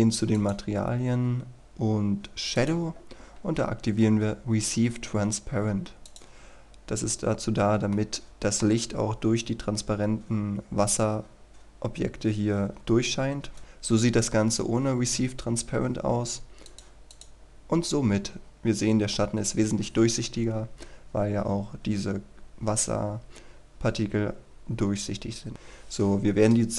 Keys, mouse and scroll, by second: 0.4 click, 7.2-8.0 scroll up 1, 8.0 middle click, 9.2-11.2 scroll up 1, 11.2-12.6 scroll down 1, 12.6 KP_0, 13.2-13.6 scroll up 1, 13.6 click, 18.4-19.7 scroll up 1, 19.7-21.0 scroll down 1, 21.0-22.5 scroll up 1, 22.5-24.6 scroll down 1, 25.5 Escape, 25.8-26.7 scroll down 1.